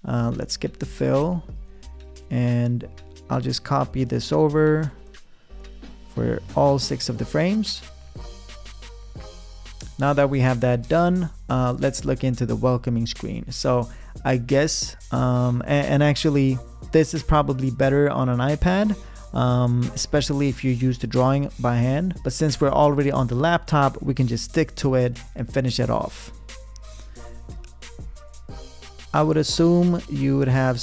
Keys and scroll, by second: 4.3 super+d, 7.1 super+d, 28.2 p.